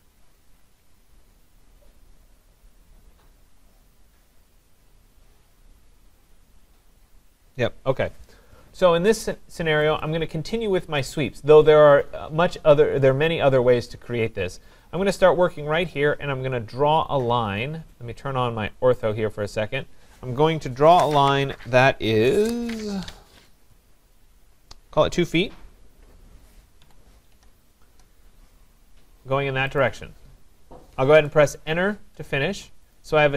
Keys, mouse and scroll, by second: 10.0 click, 11.0 right click, 11.4 scroll, 11.4-11.9 scroll down 5, 11.9 scroll up 4, 16.0 click, 16.6-17.1 scroll, 18.1 click, 19.1 click, 26.9-27.9 typing, 29.8 click, 31.5 Return, 33.0 click.